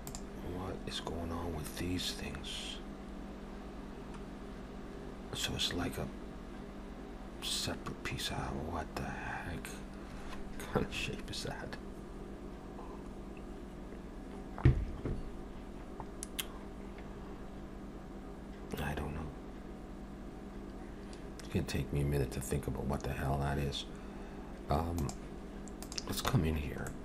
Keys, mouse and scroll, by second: 25.9 click, 26.4 Tab, 26.9 middle click.